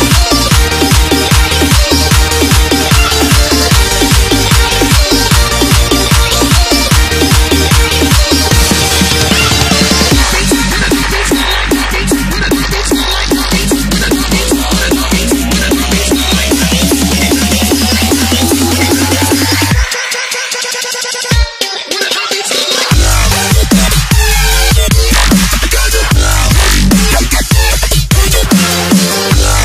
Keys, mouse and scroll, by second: 4.5 Return, 5.4 click, 7.3 click, 10.2 scroll up 1, 10.8 click, 14.3 Return, 15.4 click, 18.0 right click, 19.4 click, 20.9 t, 21.9 click, 29.2 Return.